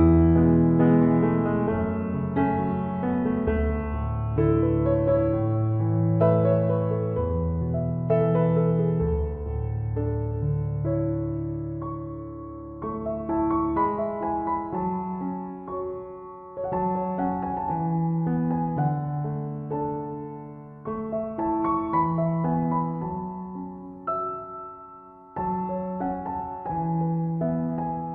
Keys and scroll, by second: 7.0 ctrl+-, 12.6 ctrl+=, 26.5 ctrl+-.